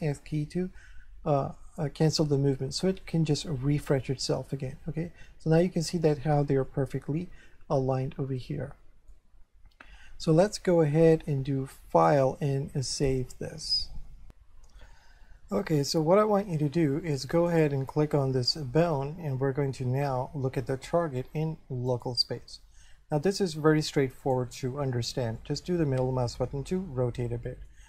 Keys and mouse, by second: 0.8 middle click, 4.8 1, 6.7 shift+middle click, 11.9 click, 13.2 click, 14.4 F3, 17.5 right click, 20.6 click, 21.9 click, 24.2 click, 25.4 middle click.